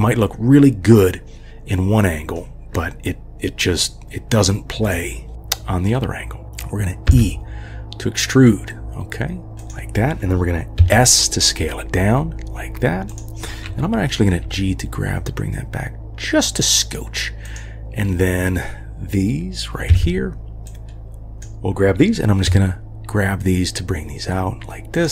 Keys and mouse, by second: 1.1-2.4 drag, 2.7-4.4 drag, 5.3-6.4 drag, 5.3 g, 7.1 e, 10.8 s, 14.4 g, 19.9 1, 20.8-21.4 drag, 22.5 g.